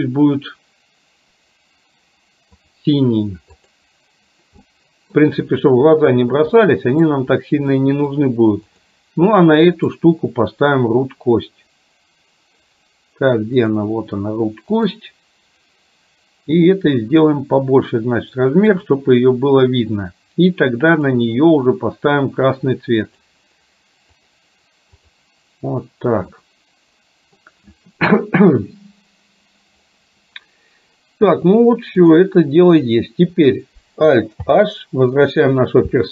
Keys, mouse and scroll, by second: 4.7 middle click, 6.7 middle click, 7.8 middle click, 8.8 drag, 10.0-14.0 drag, 15.1 click, 16.8-18.8 drag, 21.0 click, 23.3-24.5 drag, 25.1 click, 26.3-27.3 middle drag, 32.1 click, 34.6 alt+h.